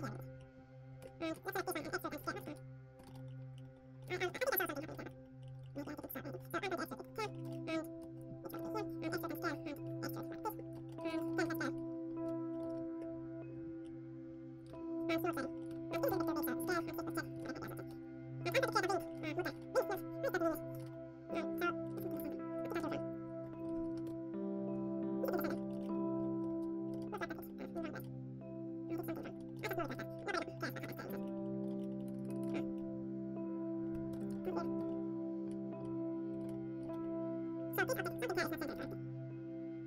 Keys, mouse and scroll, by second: 0.9-3.3 typing, 1.3 right click, 2.1-3.3 middle drag, 4.4-5.9 middle drag, 5.9 z, 6.3 e, 6.4 click, 7.1-8.4 middle drag, 7.6 click, 8.5 middle click, 9.0 click, 9.0 e, 9.8 e, 12.5-13.7 ctrl+middle drag, 12.6 ctrl+b, 14.6 middle click, 14.6 Tab, 15.4 click, 15.5-17.1 middle drag, 15.6 Tab, 16.0 ctrl+KP_Add, 16.6 s, 17.3 s, 17.8 click, 18.5-20.7 middle drag, 18.5 Tab, 18.7 a, 18.9 ctrl+s, 19.4-21.9 drag, 20.8 ctrl+s, 20.8-22.8 middle drag, 21.9 Tab, 22.1 z, 22.8 KP_1, 23.4-24.7 middle drag, 24.0 KP_3, 24.7 KP_1, 25.4 z, 25.5 middle click, 26.3 KP_5, 27.7 click, 28.0-29.1 middle drag, 29.1-30.4 drag, 29.4-33.4 middle drag, 30.8 z, 32.0 ctrl+z, 32.1 ctrl+z, 34.0 KP_7, 34.3 KP_5, 34.6-35.7 middle drag, 35.4 z, 35.7 z, 35.9-39.5 middle drag, 36.3 z.